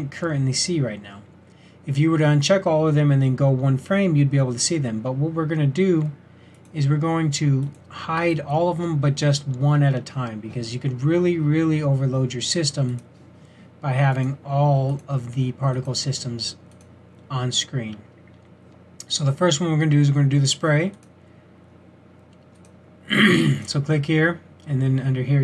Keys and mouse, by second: 6.6 click, 6.8 click, 15.3 drag, 22.8 click.